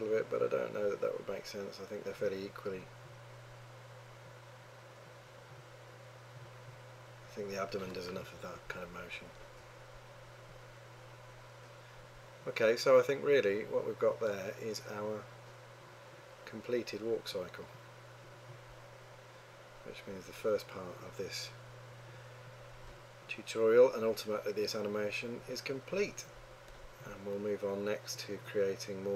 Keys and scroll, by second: 8.6 3.